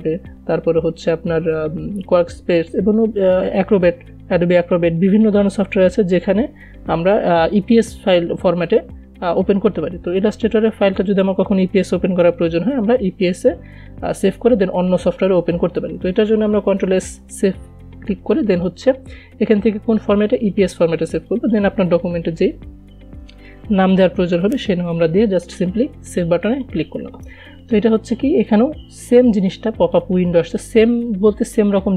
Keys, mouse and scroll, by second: 16.4 ctrl+Num_Lock, 17.2 ctrl+s, 18.9 click, 22.5-25.6 typing, 27.0 click, 30.4-31.9 drag.